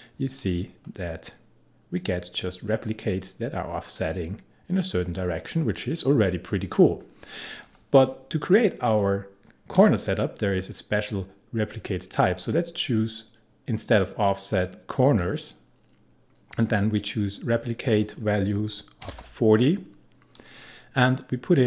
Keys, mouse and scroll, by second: 9.8 0, 10.0 click, 12.4 click, 15.2 click, 17.9 click, 19.0 4, 20.3 click.